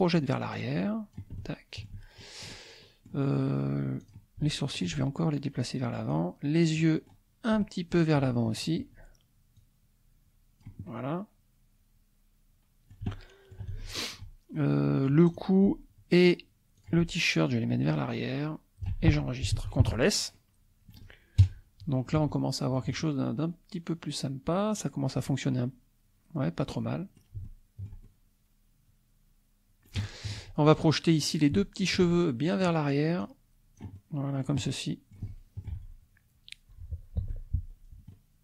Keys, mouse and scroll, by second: 0.2-1.3 drag, 1.4 shift+middle click, 2.2 shift+middle click, 2.4 click, 2.8 click, 4.2 click, 4.8 shift+click, 5.7 click, 6.6 click, 7.6 click, 8.6 shift+click, 9.6-10.8 drag, 10.9-13.7 middle drag, 13.8 shift+middle click, 14.4 shift+scroll down 1, 14.5 shift+middle click, 15.3 click, 16.9 shift+click, 17.9-19.1 drag, 19.8 ctrl+s, 20.0 scroll down 2, 20.3 click, 22.3 shift+click, 23.3-24.8 shift+drag, 25.3-27.4 drag, 27.5 shift+click, 28.4-30.0 middle drag, 30.0 shift+click, 31.1 click, 31.8 shift+click, 32.2 shift+click, 33.3-34.6 drag, 35.2 shift+click, 37.2 Tab, 37.9 scroll down 2, 38.1-38.4 drag.